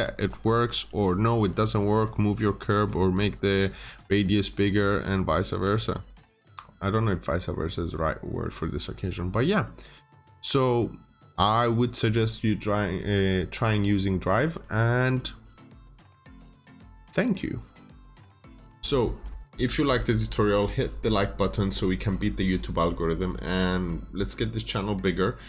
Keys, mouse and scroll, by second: 0.2-0.6 scroll up 1, 0.6 middle click, 1.1 scroll up 1, 4.3 scroll down 1, 4.6 middle click, 5.0 scroll down 1, 5.5 middle click, 5.8 scroll down 1, 8.4 middle click, 9.1-9.6 scroll up 1, 9.6 middle click, 10.3 scroll up 1.